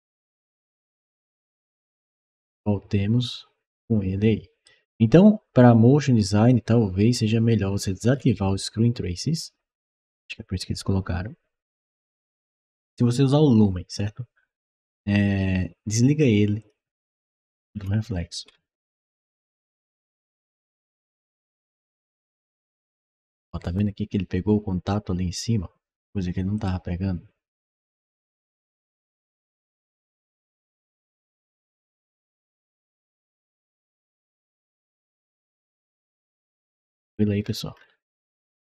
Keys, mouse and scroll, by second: 1.8-4.5 right drag, 7.9-16.4 scroll down 1, 16.4 click, 17.2-18.4 scroll down 5, 19.7 click, 21.3 click, 21.9 click, 26.4 click, 27.9 click, 29.2 click, 31.0 click, 32.7 click, 34.5-36.8 right drag, 37.2 middle click, 37.6 middle click, 38.3-38.6 scroll up 2.